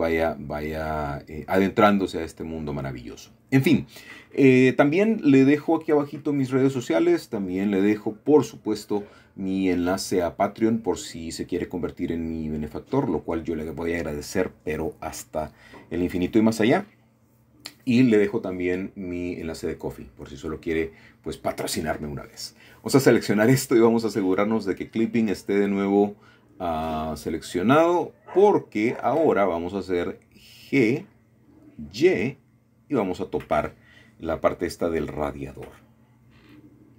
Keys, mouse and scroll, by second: 0.1 KP_1, 2.4-3.2 scroll up 2, 3.8 shift+middle click, 5.9 shift+click, 7.6 typing, 9.1 Escape, 9.5 click, 10.5 g, 10.8 z, 12.0 click, 12.5-13.3 scroll down 1, 14.4 shift+middle click, 14.6 typing, 17.3-18.1 scroll up 3, 18.1-18.8 scroll down 1, 18.3 Tab, 18.7 shift+middle click, 19.2-20.0 typing, 19.8 middle click, 21.1 alt+shift+middle click, 21.9 alt+shift+click, 22.9 shift+middle click, 24.1 KP_1, 25.2 KP_3, 26.7 ctrl+KP_3, 28.4-30.5 shift+middle drag, 30.5 typing, 31.9 typing, 33.7 click, 34.9 middle click, 36.4 Tab.